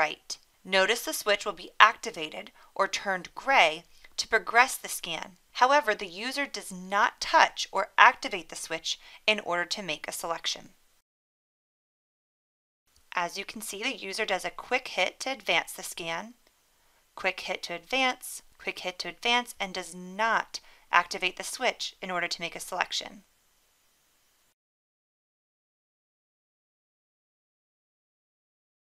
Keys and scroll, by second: 15.2 1, 17.5 1, 19.7 1, 22.8 1, 27.2 1.